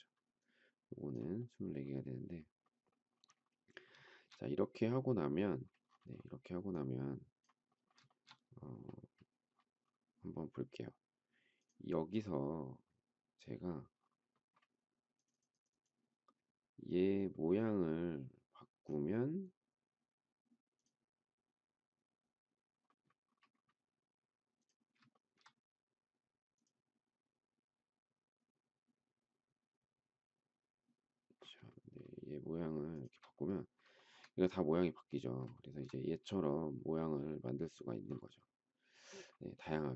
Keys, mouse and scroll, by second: 4.0 shift+middle click, 8.1 shift+middle click, 8.2 shift+double middle click, 25.1 shift+middle click, 31.6 shift+middle click, 32.9 shift+click, 33.9 shift+middle click, 35.5 shift+middle click.